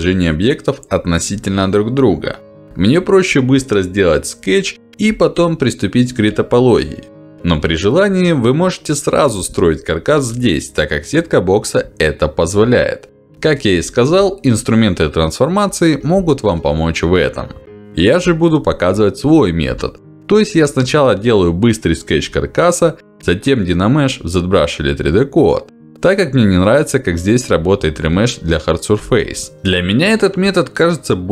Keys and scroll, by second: 4.0 F4, 23.4 w, 25.5 F4, 28.7 ctrl+z, 29.5 ctrl+z.